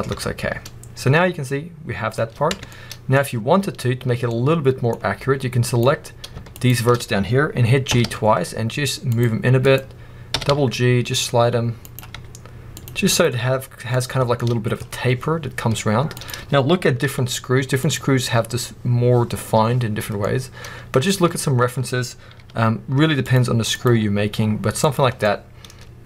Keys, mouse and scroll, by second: 0.0 Tab, 0.3 scroll down 1, 0.5 middle click, 2.0 middle click, 2.0-2.4 scroll up 1, 2.4 Tab, 2.6 middle click, 3.0 scroll up 1, 4.2 middle click, 5.5 click, 6.4 shift+click, 6.9 scroll up 1, 7.8 g, 9.5 click, 10.2 g, 11.8 right click, 12.0 g, 13.0 click, 13.2 g, 13.9 click, 14.1 scroll down 1, 14.3-14.8 middle drag, 14.7 scroll up 2, 16.0 click, 16.9 g, 17.8 click, 19.9 scroll down 1, 20.1-22.2 middle drag, 22.2 g, 23.6 click, 23.8 g, 24.8 click, 25.0 scroll down 1, 25.1 middle click.